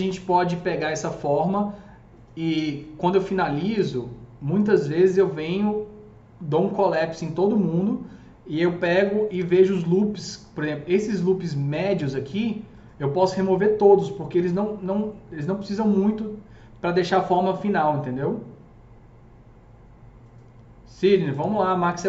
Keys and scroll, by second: 8.9 F3, 9.3 F3, 9.4 F4.